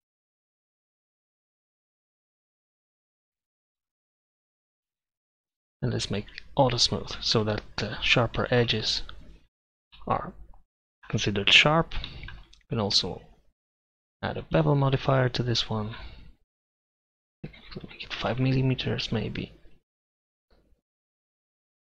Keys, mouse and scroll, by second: 1.1 s, 2.9 f, 3.3 Tab, 4.1 Tab, 5.0 ctrl+KP_Add, 5.4 e, 5.5 Tab, 13.7-17.0 drag, 18.3 m.